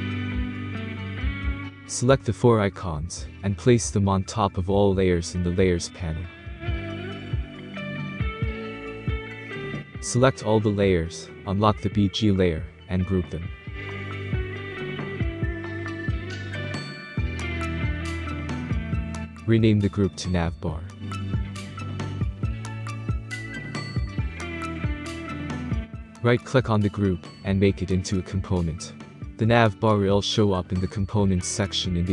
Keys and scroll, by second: 20.1-22.5 typing, 22.6 Return.